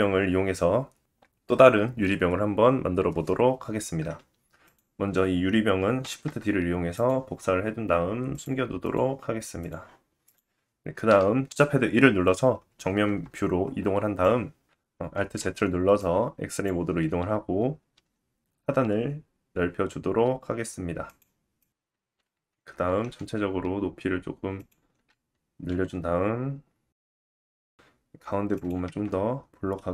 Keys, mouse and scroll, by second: 4.6 click, 6.1 shift+d, 8.3 click, 8.8 click, 9.6 click, 10.2 click, 11.1 KP_1, 13.3-13.6 scroll up 1, 13.6 Tab, 14.4-15.7 drag, 15.5 alt+z, 15.6 middle click, 15.6 right click, 17.2 s, 19.3 click, 20.3 s, 21.7 click, 21.8 Tab, 22.6 alt+z, 23.8 s, 27.4 s, 28.8 Tab.